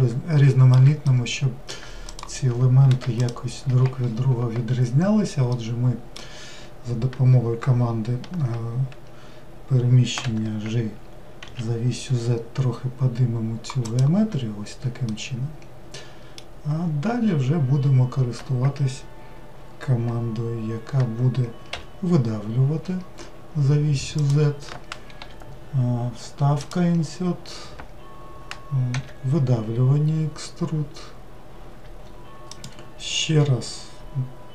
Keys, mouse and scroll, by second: 2.1 click, 3.2 ctrl+shift+click, 5.6-8.7 middle drag, 15.1-18.2 middle drag.